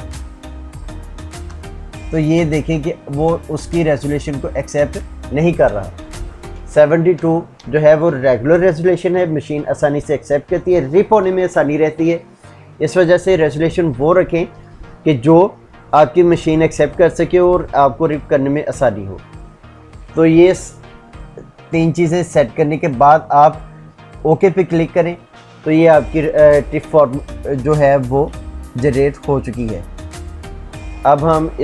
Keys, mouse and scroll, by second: 0.1 Tab, 1.3 shift+Tab, 7.0 shift+Tab, 24.6 click, 29.3 click.